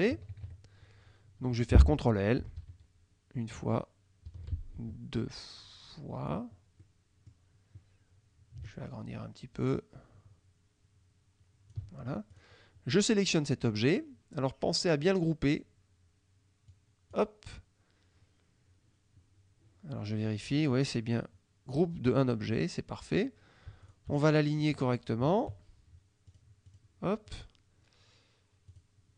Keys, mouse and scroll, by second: 0.2 KP_Subtract, 2.6 ctrl+l, 4.3 ctrl+l, 6.9 click, 8.8-12.0 ctrl+shift+drag, 12.4 shift+click, 16.8 click, 23.9 shift+click, 25.3 shift+click, 26.4 click, 26.8 click, 27.3 click, 28.8 click.